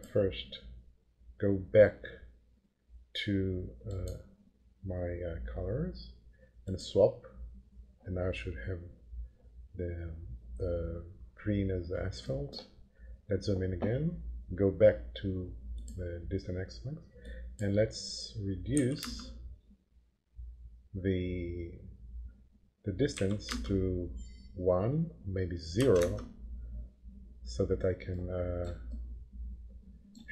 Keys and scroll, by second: 18.7 5, 18.9 Return, 23.1 1, 23.5 Return, 25.7 0, 25.9 Return.